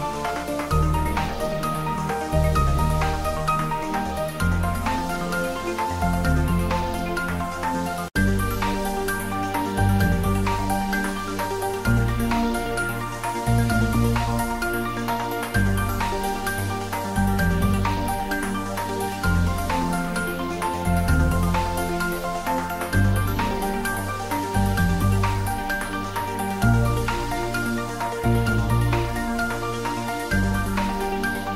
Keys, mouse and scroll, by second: 0.3 click, 0.5 Tab, 0.9 shift+middle click, 1.6 ctrl+middle click, 1.6-2.0 shift+middle click, 2.6 click, 4.1 Tab, 4.4 click, 6.3-7.0 scroll down 1, 7.8 click, 9.2 Tab, 9.6 click, 10.4 Tab, 10.7 click, 11.9-12.4 scroll down 1, 13.0 click, 14.7 s, 15.7 click, 16.1 ctrl+s, 16.6 click, 17.5 Tab, 18.0 click, 18.8 click, 20.0 click, 21.9-22.9 scroll down 2, 22.9 click, 24.1 s, 24.6 click, 27.7 ctrl+s, 28.7 click, 29.3 s, 29.9-30.2 ctrl+middle drag, 31.1 Tab, 31.4 click.